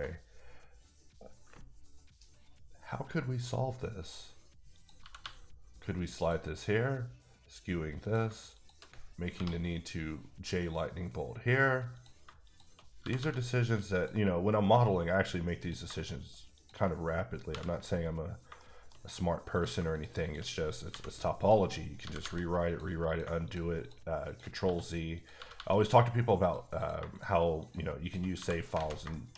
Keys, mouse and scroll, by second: 5.0 g, 5.2 g, 6.1 click, 8.2 shift+click, 8.8 shift+click, 9.3 j, 11.9 j, 12.2 shift+click, 13.0 g, 13.1 g, 13.9 click, 15.6 click, 16.5 shift+click, 17.5 j, 18.1-18.6 scroll up 2, 18.6 shift+middle click, 19.7 shift+click, 20.2 shift+click, 20.9 m, 21.4 click, 22.0 g, 22.2 g, 22.7 click, 23.1 click, 23.4 shift+click, 23.8 shift+double click, 24.3 shift+click, 24.6 f, 25.1 click, 25.3 g, 25.5 g, 26.4 click, 26.8 click, 27.6 shift+double click, 28.0 shift+click, 28.4 f, 28.5 scroll, 28.7 alt+a, 29.1 shift+middle click.